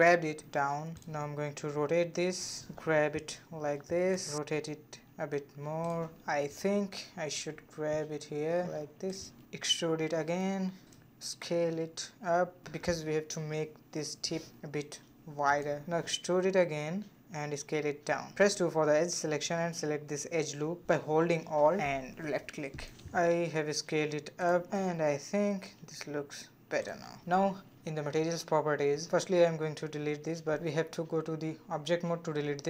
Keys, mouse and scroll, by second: 1.3 r, 3.0 g, 4.4 r, 6.7 g, 8.1 g, 9.0 e, 11.9 s, 14.4 e, 15.5 s, 17.2 middle click, 18.1-18.6 scroll up 2, 18.6-20.1 middle drag, 20.1 2, 20.5 alt+click, 21.3 s, 23.1-25.8 middle drag, 25.8 a, 26.1 a, 26.6-27.4 drag, 27.9 click, 28.8-30.9 drag, 30.9 Tab, 31.7 click.